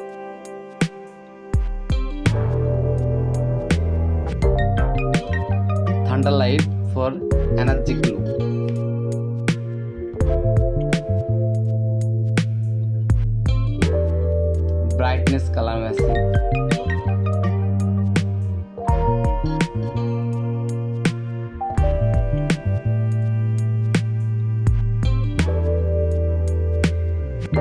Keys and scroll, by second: 0.3 [, 0.9 ], 1.9 ctrl+z, 2.6 [, 3.9 [, 5.2 space, 6.8 ctrl+t, 7.9 Return, 9.5 ], 10.3 ], 11.0 ctrl+z, 12.9 space, 15.9 space, 17.1 ctrl+i, 18.1-21.1 typing, 21.5 ctrl+t, 22.9 ctrl+t, 24.0 ctrl+t, 27.2 Return.